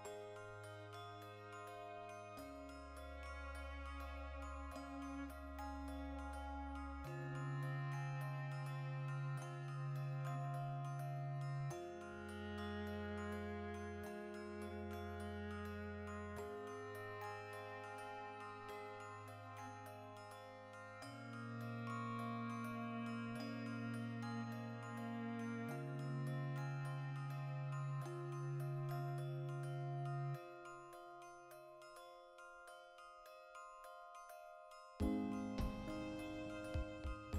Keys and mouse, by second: 0.0 a, 0.5 g, 1.9 click, 2.8 Tab, 4.9 right click, 5.1-6.7 ctrl+middle drag, 6.7 right click, 7.2 shift+s, 7.8 right click, 8.6-13.3 drag, 13.3 middle click, 13.8 right click, 14.0-15.6 shift+middle drag, 14.2 Tab, 15.0 Tab, 15.6 right click, 15.7 Tab, 16.3-23.7 middle drag, 17.9 Tab, 18.7 \, 19.1 Tab, 22.8 Tab, 23.0 \, 23.7 right click, 24.0-31.8 middle drag, 24.1 Tab, 25.0 Tab, 31.8 right click, 32.0 Tab, 32.5 right click, 32.6 Tab, 32.8-34.3 ctrl+shift+middle drag, 34.3 2, 34.5 alt+right click, 34.9-36.7 shift+middle drag, 36.7 ctrl+b.